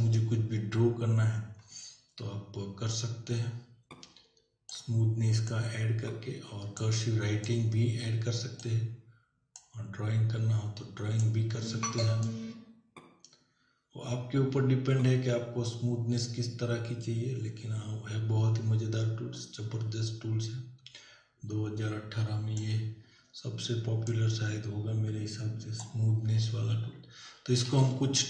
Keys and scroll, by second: 27.7 ctrl+w.